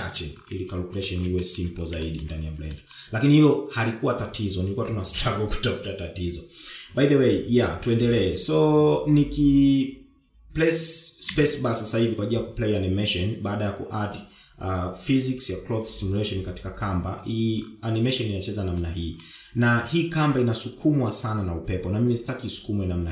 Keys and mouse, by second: 0.4 shift+middle click, 1.1 shift+middle drag, 1.7 shift+middle click, 2.4 shift+middle click, 11.0 space, 18.6-19.1 shift+middle drag, 22.8 space.